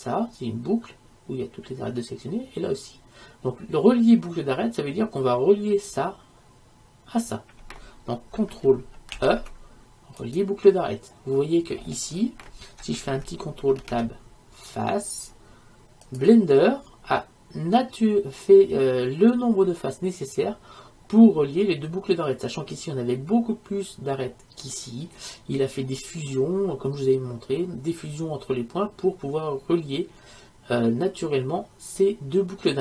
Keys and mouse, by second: 9.2 ctrl+e, 13.9 ctrl+Tab.